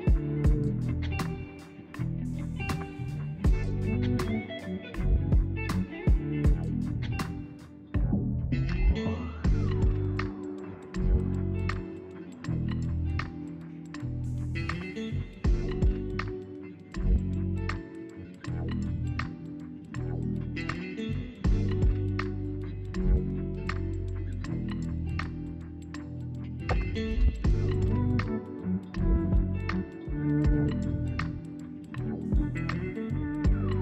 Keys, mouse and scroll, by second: 0.0-1.7 typing, 2.9 z, 4.4-5.4 drag, 6.2 g, 9.5 z, 9.8 Tab, 10.9 Tab, 11.5 alt+click, 12.0 g, 12.5 z, 12.7 Tab, 14.2 Tab, 14.8 alt+click, 15.3 s, 16.1 s, 16.2 s, 16.2 s, 16.4 Tab, 17.2 Tab, 20.3-20.6 scroll down 2, 20.6-23.1 middle drag, 23.1 click, 23.3 scroll down 2, 23.5-28.3 middle drag, 28.3-28.9 scroll up 2, 28.9 scroll down 1, 29.0-30.0 middle drag, 30.0-30.5 scroll up 1, 30.5 click, 30.7 Tab, 30.9 middle click, 31.5 ctrl+r, 32.4 middle click, 32.6 Tab, 32.9-33.8 middle drag.